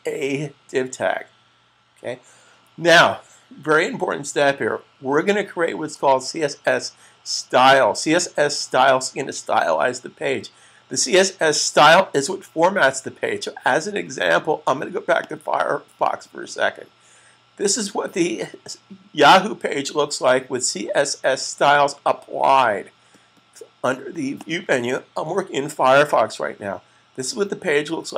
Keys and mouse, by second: 15.0 click, 24.3 click.